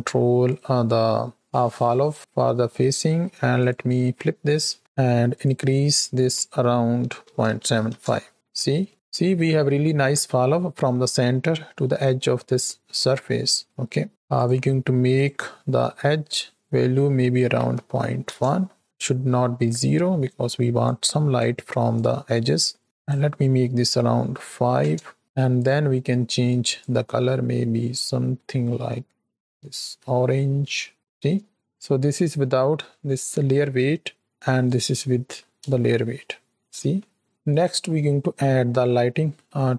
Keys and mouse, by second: 0.5-1.2 drag, 2.1 click, 2.5 middle click, 3.5-4.5 drag, 4.7 middle click, 5.2-7.8 drag, 8.5 shift+middle click, 13.5 shift+middle click, 14.3 click, 19.7 middle click, 20.9 click, 21.9 click, 22.7 middle click, 23.0-24.8 drag, 31.9 middle click, 34.3 ctrl+alt+click, 35.8-37.2 shift+middle drag, 37.3-37.8 drag.